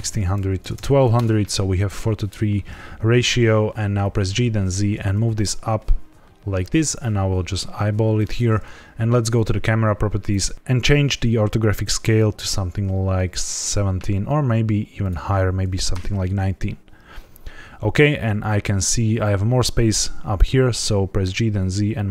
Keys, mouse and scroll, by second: 0.7 KP_0, 1.9 scroll down 1, 3.5 scroll down 1, 4.0 g, 4.2 z, 8.1 click, 9.3 click, 10.2 click, 14.9 click, 17.1-18.0 scroll up 2, 19.7 g, 19.9 z.